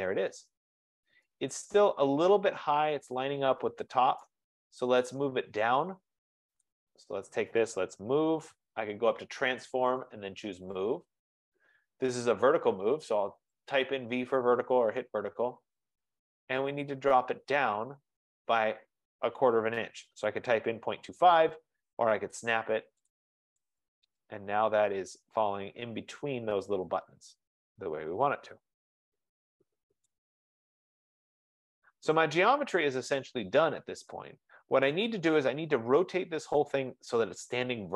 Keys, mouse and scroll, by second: 0.9 scroll, 1.3 middle click, 4.3 right click, 5.3 F15, 7.2 click, 7.7-8.9 typing, 10.1 click, 11.0 Return, 11.0 click, 13.9 click, 15.1-15.4 scroll, 16.0 scroll, 17.6 click, 21.6 click, 23.2 click, 24.0-24.4 scroll, 25.7 middle click, 28.8 scroll, 30.1 right click, 30.4-31.1 scroll, 35.0 right click.